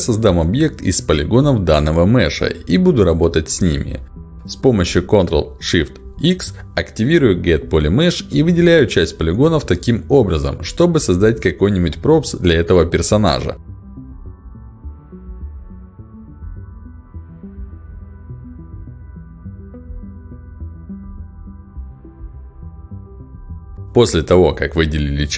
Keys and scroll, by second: 4.9 ctrl+shift+x.